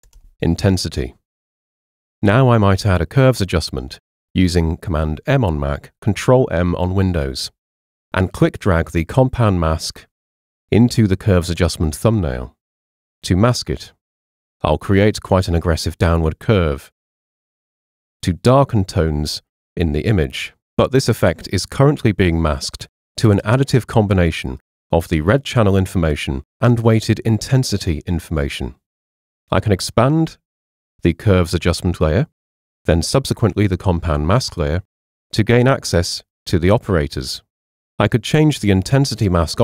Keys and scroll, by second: 0.0-0.6 typing, 4.3 super+m.